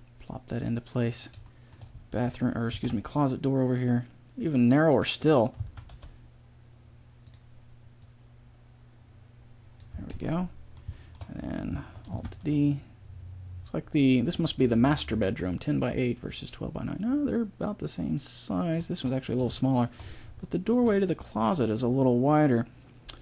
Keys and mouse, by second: 2.7 alt+d, 5.6 s, 8.0-9.8 drag, 10.0-12.8 middle drag, 12.2 alt+d, 15.0-16.8 middle drag, 19.6 middle click.